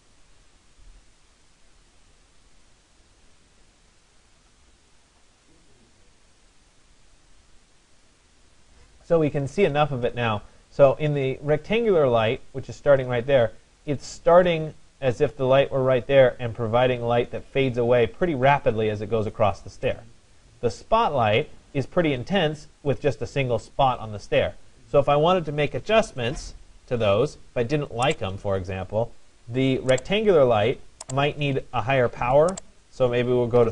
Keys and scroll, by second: 33.2 3.